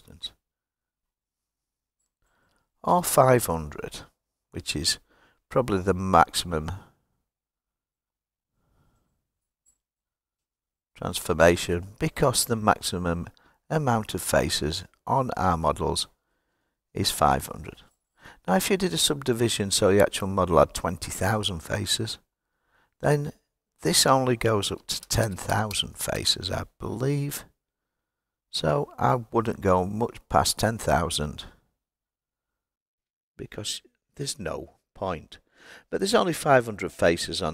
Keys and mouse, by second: 0.6-4.5 drag, 3.1 KP_0, 18.5 click, 23.3-28.5 drag, 25.3 KP_0, 25.7 KP_0.